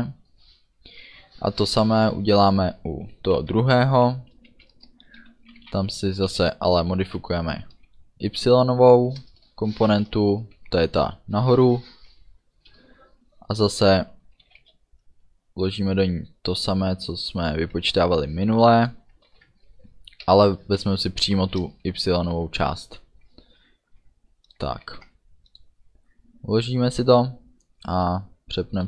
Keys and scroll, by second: 3.4 -, 4.5 End, 4.8 Return, 5.6 v, 5.8 e, 9.3 Return, 10.0 space, 14.5 =, 14.7 space, 18.1 ctrl+c, 19.4 ctrl+v, 21.7 Return, 22.4 ů, 24.9 ctrl+s.